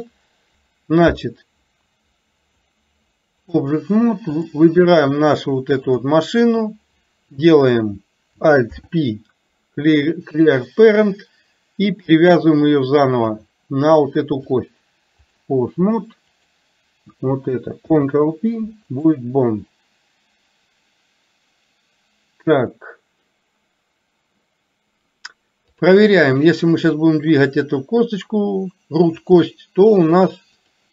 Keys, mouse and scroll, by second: 2.6-3.8 drag, 4.4 click, 13.0 shift+click, 14.6 click, 16.4 click, 25.8 click, 26.9-29.3 drag.